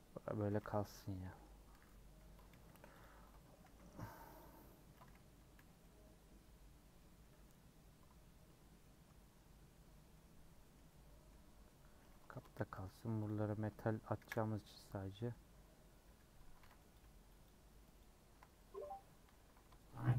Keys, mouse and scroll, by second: 1.7 /, 2.2 Tab, 2.5 h, 3.0 click, 3.1 Tab, 3.3 middle click, 3.6 a, 4.4 u, 5.5 /, 5.8-7.2 middle drag, 7.2 /, 8.3 scroll up 1, 8.6 scroll down 3, 8.8-12.3 middle drag, 12.3 Tab, 12.5 h, 13.3 Left, 14.2 KP_Decimal, 14.5 Tab, 16.6 alt+z, 16.9 Left, 18.0 shift+click, 18.5 middle click, 19.3 ctrl+z, 20.0 shift+click.